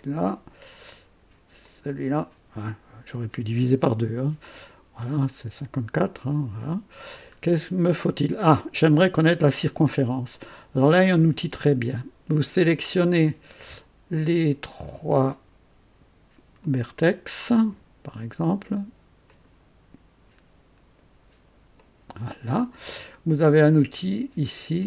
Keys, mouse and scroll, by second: 1.6 ctrl+click, 4.4 click, 5.8-7.1 drag, 7.3-8.6 scroll down 5, 10.3-10.9 right drag, 16.5 click, 19.2 ctrl+click, 21.7 ctrl+click.